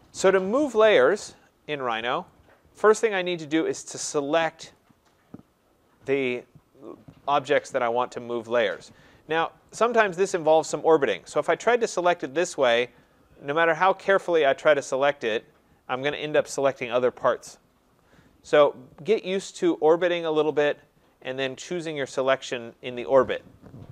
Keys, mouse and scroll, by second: 4.1 right click, 4.7 click, 9.7 right click, 10.4 click, 12.2 click, 14.3 click, 15.0 click, 20.2 right click, 20.6 click, 22.2 click.